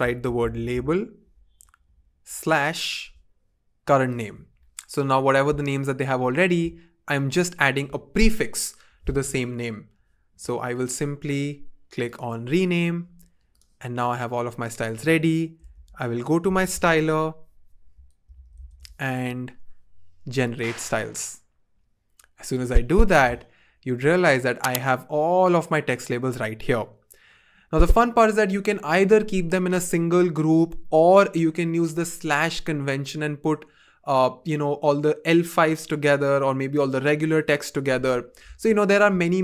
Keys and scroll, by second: 0.0-2.2 typing, 15.7 super+/, 16.4 typing, 18.0-19.2 typing.